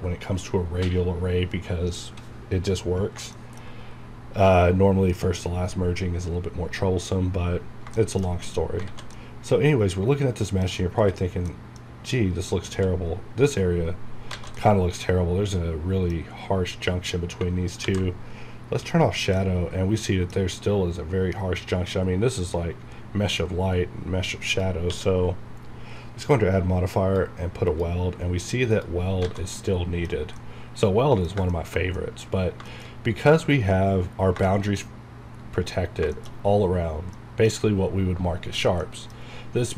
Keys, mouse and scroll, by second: 2.2-2.9 scroll down 1, 3.1 scroll up 1, 3.3 middle click, 3.8 scroll up 1, 7.6 scroll down 1, 7.9 shift+middle click, 8.7 scroll up 1, 8.8 alt+a, 9.1-10.7 middle drag, 10.7 scroll up 1, 11.0 click, 11.5 middle click, 11.9 scroll up 1, 12.7 q, 14.0 scroll down 1, 14.6-17.1 middle drag, 17.1 scroll down 1, 18.0 alt+v, 18.9 click, 19.4-22.8 middle drag, 24.5 click, 24.9 q, 26.9 click, 29.1 scroll down 1, 29.4 alt+a, 29.5-31.5 middle drag, 32.3 scroll up 1, 32.6 shift+middle click, 32.9 shift+scroll up 2, 34.3 scroll down 1, 34.4 shift+middle click, 35.9 scroll down 1, 36.1-38.8 shift+middle drag, 39.2 scroll up 1.